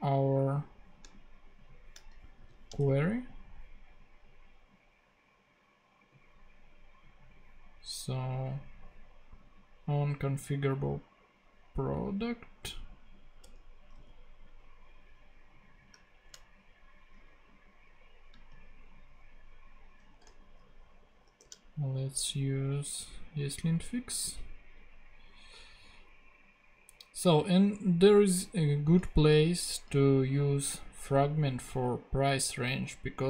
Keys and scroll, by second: 2.3 shift+super+c, 2.8 super+Tab, 13.4 Return, 13.9 super+v, 16.1 shift+Tab, 18.3 space, 21.2 shift+super+p.